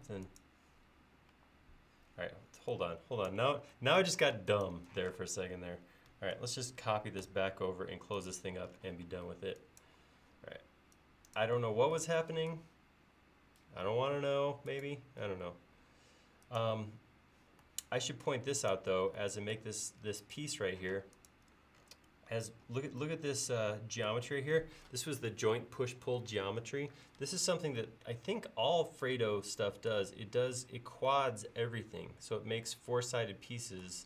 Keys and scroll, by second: 1.3 e, 4.4 space, 5.0 m, 9.1 e, 21.0 space.